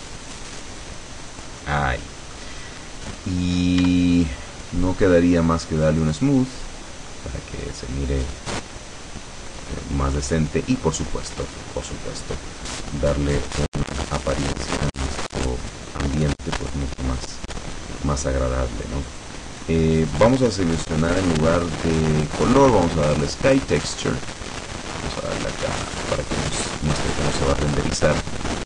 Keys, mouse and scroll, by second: 1.4 click, 1.7 middle click, 2.6 scroll down 2, 2.9 middle click, 3.9 Tab, 3.9 scroll up 2, 4.3-4.6 scroll down 2, 6.1 click, 7.2-10.1 middle drag, 10.4-11.7 middle drag, 13.8 click, 14.7 click, 17.3 click, 19.1 click, 22.6 click, 23.9 click, 25.5 click, 26.5 click, 27.8-28.1 scroll down 1.